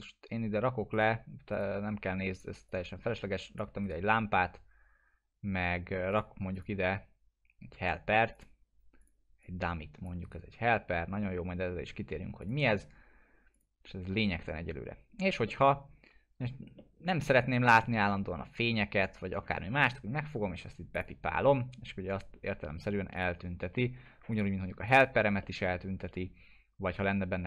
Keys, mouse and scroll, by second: 3.8 right click, 6.1 click, 10.2 right click, 10.7-11.8 middle click, 11.2 alt+middle click, 12.4 click, 15.4-16.7 middle click, 17.2-17.7 scroll down 1, 17.7 scroll up 1, 18.0 middle click, 20.9 click, 25.4 middle click.